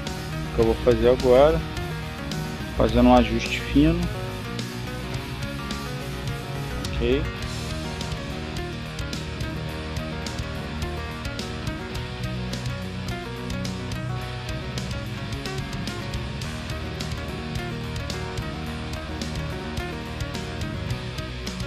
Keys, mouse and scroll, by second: 1.0-4.1 drag, 5.5-7.8 drag, 8.7 click, 9.5 click, 10.7 click, 11.4-15.1 drag, 15.8 click, 17.4 click, 18.3 click, 19.0 click, 21.0 click.